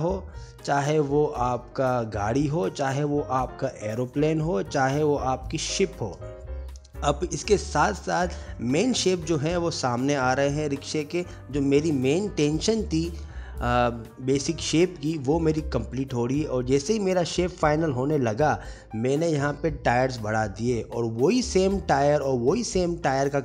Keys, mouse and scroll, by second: 0.5 shift+click, 0.7 s, 1.3 click, 1.5 shift+click, 1.7 s, 2.4 click, 2.6 shift+click, 2.8 s, 3.6 click, 4.0 shift+click, 4.1 s, 4.8 Tab, 4.8 middle click, 4.8 middle click, 5.2 middle click, 5.4 alt+z, 5.5 middle click, 5.8 Tab, 6.0 1, 6.0 alt+z, 6.3 shift+click, 6.6 shift+click, 6.7 s, 7.3 click, 7.6 shift+click, 7.9 s, 8.0 middle click, 8.3 Tab, 8.3 middle click, 8.9 middle click, 8.9 alt+z, 9.0 middle click, 9.5 Tab, 9.5 click, 9.6 middle click, 10.1 ctrl+s, 10.1 middle click, 10.4 click, 10.6 click, 12.1 click, 12.2 click, 12.3 shift+d, 13.4 middle click, 13.4 click, 14.0 g, 14.1 shift+middle click, 14.2 g, 14.7 middle click, 15.3 click, 15.7 g, 15.9 click, 16.2 shift+d, 16.7 s, 17.4 middle click, 17.8 click, 17.9-21.5 typing, 18.5 middle click, 19.5 middle click, 20.3 Tab, 20.4 alt+z, 21.0 click, 21.3 click, 22.2 middle click, 22.5 ctrl+z, 22.6 g.